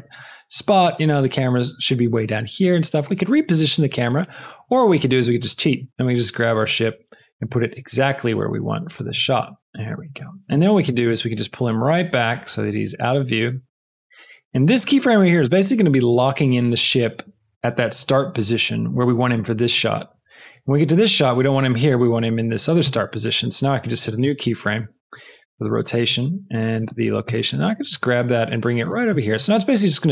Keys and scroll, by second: 5.8 g, 7.5 g, 7.8 x, 10.7 g, 10.9 x, 24.1 |, 27.2 g.